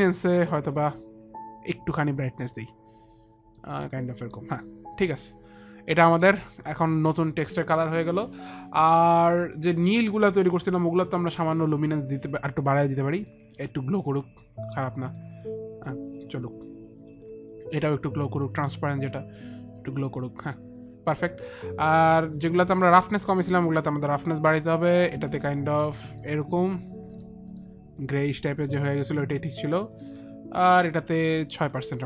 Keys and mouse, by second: 2.2 click, 3.4 click, 4.9 click, 7.6 click, 10.3 click, 13.1 click, 14.6 click, 15.1 click, 17.0 click, 20.2 click, 21.3 click, 22.7 click, 24.4 click, 27.0 click, 27.1 click, 27.4 click.